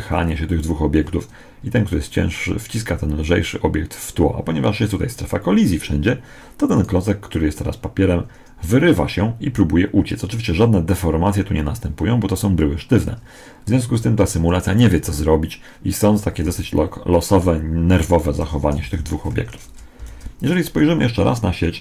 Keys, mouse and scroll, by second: 15.0-17.0 middle drag, 16.3 alt+a, 18.1 Escape, 18.7 alt+a, 19.2 Escape, 19.8 shift+Left.